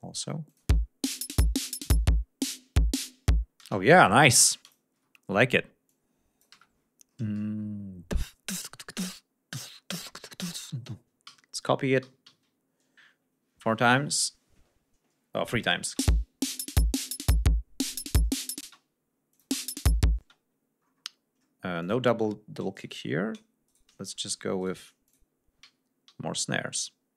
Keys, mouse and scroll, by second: 0.5 click, 0.7 space, 3.4 ctrl+scroll down 2, 3.7 ctrl+space, 4.1 ctrl+click, 4.9 Delete, 5.2-5.5 scroll up 2, 5.9 click, 6.5 Delete, 6.8-7.2 scroll down 2, 8.1 scroll up 2, 8.6 click, 9.0 scroll up 2, 10.1 scroll down 2, 10.6 scroll down 2, 11.3 alt+d, 12.0 alt+d, 15.6 click, 15.9 space, 18.4 ctrl+scroll up 2, 18.7 ctrl+space, 19.4 click, 19.5 space, 19.7 ctrl+scroll up 2, 20.2 ctrl+space, 20.9-21.2 scroll up 2, 21.4 scroll down 2, 21.8 click, 22.2 scroll down 2, 22.8 shift+right click, 23.0 shift+scroll down 2, 23.7 shift+right click, 24.6 ctrl+shift+right click, 25.1 ctrl+shift+click, 25.7 alt+d, 26.6 alt+scroll down 2.